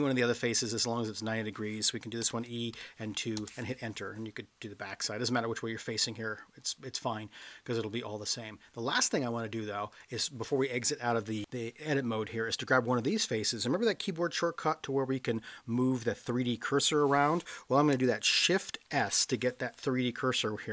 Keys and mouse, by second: 2.3 e, 2.7 2, 3.3 Return, 5.3-6.6 middle drag, 7.4-7.8 middle drag, 9.9 click, 18.9 shift+s.